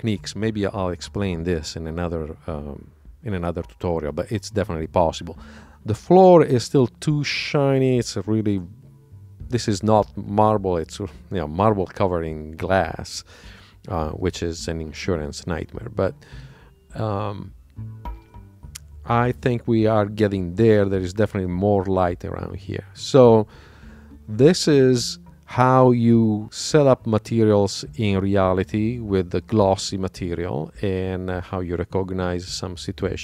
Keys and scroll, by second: 9.8 super+Tab, 15.3 super+Tab.